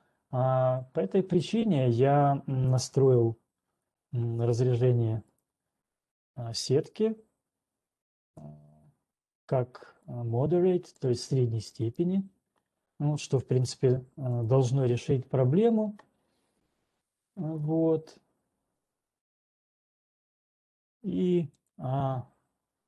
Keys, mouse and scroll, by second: 3.1 click, 5.7 click, 8.5 click, 11.6 click, 12.3 click, 12.8 click, 14.6 click, 18.6-19.6 scroll, 19.6-20.1 scroll, 21.6 click, 22.6-22.8 scroll.